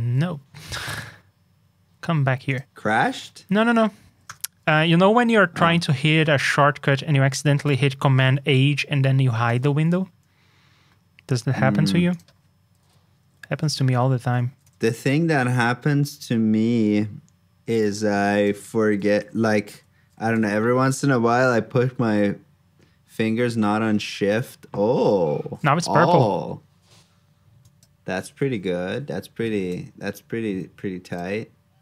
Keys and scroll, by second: 9.4 super+j, 12.7 super+c, 13.2 super+j, 18.9 super+c, 19.6 super+j, 29.6 super+j.